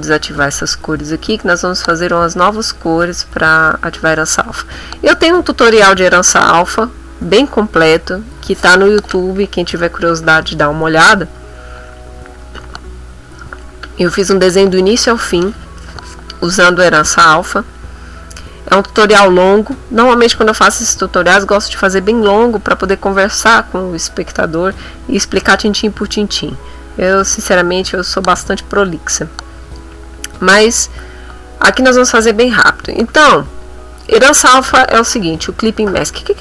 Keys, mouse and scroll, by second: 0.3 click, 2.2-3.3 middle drag, 3.4 b, 3.8 middle click.